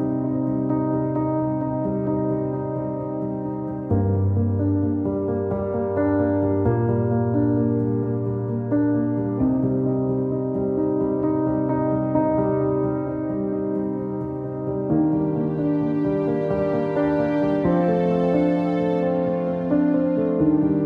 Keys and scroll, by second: 0.0 alt+x, 11.9 alt+x, 12.7 q, 17.8 alt+x.